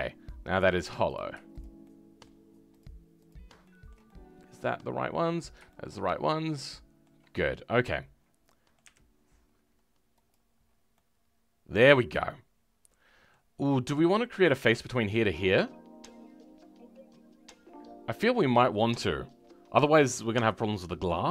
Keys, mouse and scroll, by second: 0.0-1.1 scroll up 3, 1.1 click, 1.8 shift+middle click, 2.8 shift+click, 3.3 shift+click, 3.6-8.8 shift+middle drag, 8.8 Delete, 10.6 scroll down 2, 10.9-13.5 middle drag, 13.5-14.4 scroll up 3, 14.4 click.